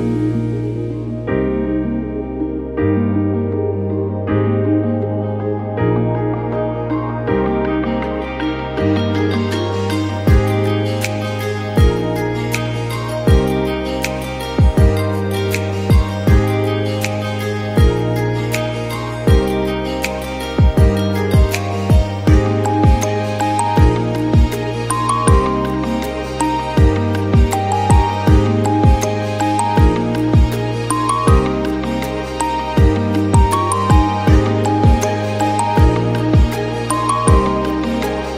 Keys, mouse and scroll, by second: 0.0 scroll up 1, 0.3 s, 1.9-2.7 middle drag, 2.7 KP_1, 2.9-3.3 scroll up 1, 3.3 g, 5.2 s, 6.1 click, 6.3 middle click, 6.6 scroll down 1, 6.7-7.2 middle drag, 7.2 click, 7.5 KP_1, 7.9 Tab, 8.2 alt+z, 8.8 a, 9.2 g, 10.4 e, 12.1 s, 13.0 click, 13.4 s, 14.6 KP_7, 15.1 shift+middle click, 15.3-15.9 scroll up 2, 15.5 shift+middle click, 15.9 shift+middle click, 16.4 s, 17.7 scroll down 1, 17.9 middle click, 18.3 scroll down 2, 18.5 KP_1, 18.8-19.1 scroll up 1, 19.1 shift+middle click, 19.4 scroll up 3, 19.6 shift+middle click, 20.0 g, 21.0 scroll down 15, 21.3 shift+middle click, 21.4 scroll up 1, 21.6 shift+middle click, 22.0 ctrl+r, 23.6 click, 23.9 alt+click, 24.3 s, 25.4 alt+click, 25.7 s, 27.1 scroll up 1, 27.3 alt+click, 27.6 s, 29.7 ctrl+r, 30.2 scroll up 2, 30.5-32.5 shift+middle drag, 32.5-32.8 scroll down 1, 32.8 middle click, 33.3 alt+z, 33.7 Tab, 33.9 drag, 34.0-35.3 shift+middle drag, 35.3 scroll up 1, 35.5 middle click, 35.7 scroll down 3, 35.9-36.3 shift+middle drag, 36.3 scroll up 1, 36.5 shift+middle click, 36.9 KP_1, 37.0 scroll up 1, 37.2 drag, 37.6 s, 38.3 click.